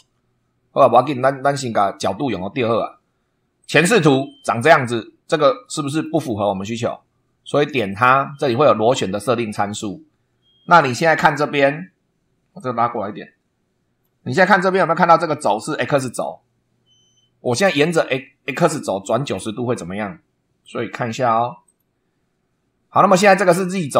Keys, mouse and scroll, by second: 0.0 super+2, 3.6 click, 5.0 scroll down 1, 5.6 shift+middle click, 7.8 click, 12.6-14.2 drag, 20.6 click, 21.6 click.